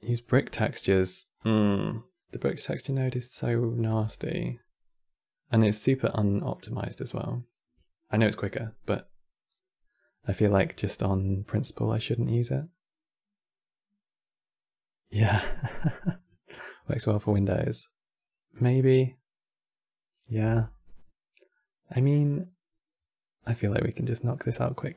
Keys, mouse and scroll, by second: 1.1-1.8 drag, 1.8 middle click, 2.5 scroll up 1, 2.8-3.7 middle drag, 3.7 shift+a.